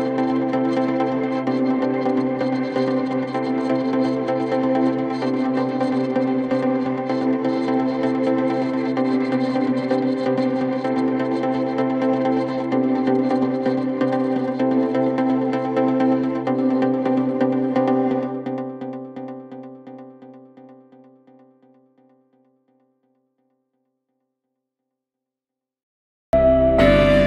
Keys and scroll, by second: 17.8 Insert, 19.2 Delete, 20.2 shift+F2.